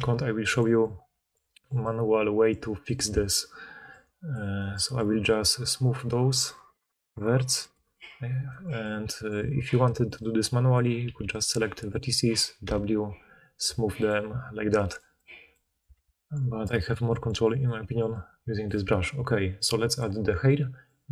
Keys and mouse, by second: 11.0 b, 12.6-17.9 drag, 12.6 w, 15.9 alt+a.